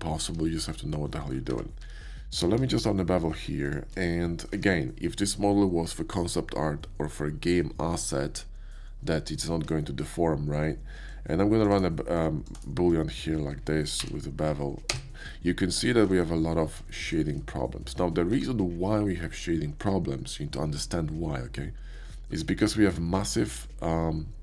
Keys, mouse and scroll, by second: 0.5 shift+middle click, 1.0 shift+middle click, 1.5 Tab, 1.8 q, 2.3 click, 3.6 shift+click, 4.1-4.5 shift+middle drag, 5.1 KP_5, 9.8-11.1 shift+middle drag, 11.1-11.6 shift+drag, 11.7 shift+right drag, 12.1-12.5 shift+drag, 12.5 shift+right drag, 12.9 click, 14.0 b, 14.8 space, 15.3-15.7 middle drag, 15.9 shift+middle drag, 16.2 KP_5, 16.7 shift+middle drag, 17.2 shift+KP_5, 18.3 Tab, 22.6 shift+middle click, 23.1 Tab, 23.5 right click.